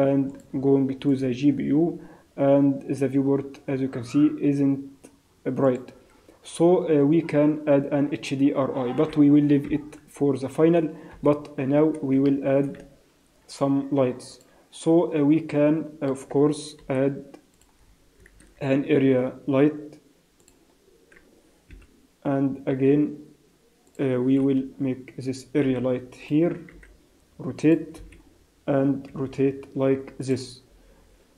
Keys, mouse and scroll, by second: 0.3 click, 5.7 click, 9.7 KP_0, 10.1 scroll down 4, 11.2 KP_7, 11.6 scroll up 2, 12.2 shift+middle click, 12.7 z, 13.5 z, 15.5 middle click, 16.1 scroll up 4, 16.8 KP_7, 17.5 click, 17.7 scroll down 4, 18.3 shift+a, 21.7 KP_1, 22.2 scroll down 3, 22.7 g, 24.4 KP_7, 25.6 g, 26.7 r, 27.9 KP_1, 29.1 r.